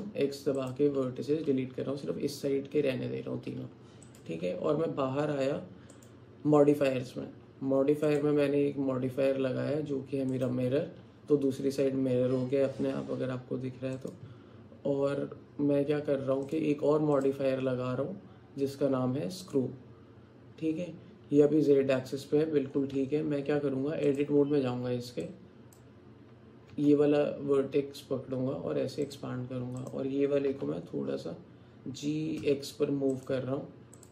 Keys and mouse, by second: 3.6 Tab, 6.1 click, 8.2-10.5 drag, 14.1 click, 17.3-19.6 drag, 23.0 Tab, 24.1 click, 25.3 click, 26.7 g, 30.5 g.